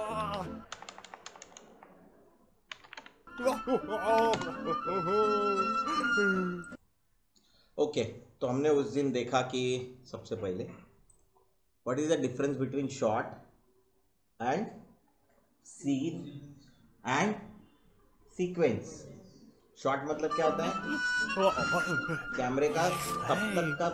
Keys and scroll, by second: 0.0-0.7 typing, 2.3-4.6 typing.